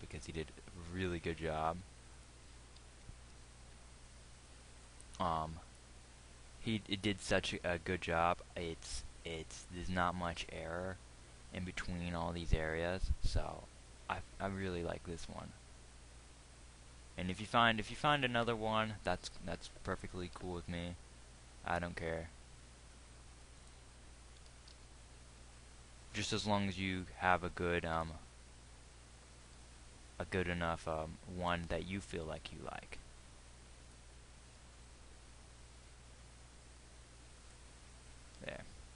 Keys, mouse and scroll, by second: 3.2 g, 7.6 g, 19.8-20.8 drag, 20.8 g, 24.8 g, 35.0 g.